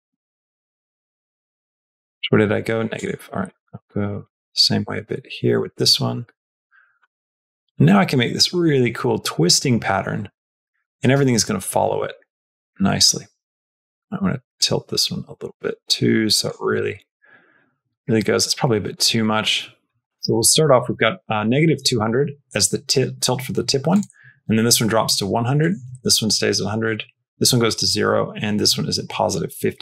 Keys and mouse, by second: 1.8 click, 2.8 click, 3.4-8.6 drag, 9.1 space, 11.0 space, 12.0 shift+middle click, 14.4-16.3 drag, 16.5 space, 17.8 space, 18.2 shift+click, 18.2 shift+middle click, 19.1 click, 20.0 click, 23.8 click, 25.4 click, 25.8 shift+middle click, 26.7 click, 27.2 shift+middle click, 28.0 click, 29.1 shift+middle click, 29.7 space.